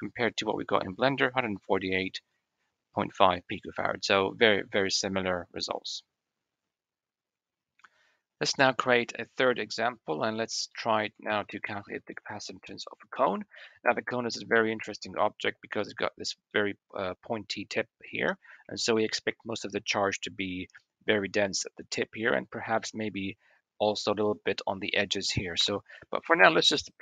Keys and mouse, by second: 10.2 click, 10.6 click, 11.2 shift+a, 13.6 drag, 14.0-15.4 middle drag, 16.4 click, 18.8 shift+drag, 20.4 middle click, 22.2 shift+middle click, 22.6-23.1 middle drag, 25.5 KP_1, 26.3 shift+click.